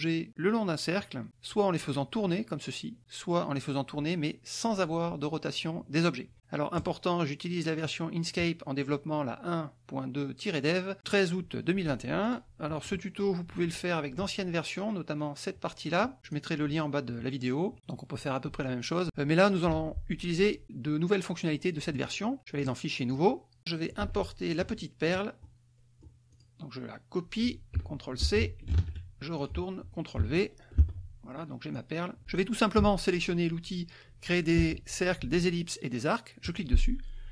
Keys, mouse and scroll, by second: 4.6 click, 6.0 click, 6.9 click, 7.9 click, 12.4 click, 13.0 click, 16.4 click, 19.0 alt+Tab, 19.6-22.1 drag, 23.0 click, 24.0 click, 24.6 alt+Tab, 25.1 alt+click, 25.9 click, 26.7 click, 28.7 ctrl+c, 29.3 ctrl+alt+Tab, 29.9 alt+click, 31.3 ctrl+v, 37.0 click.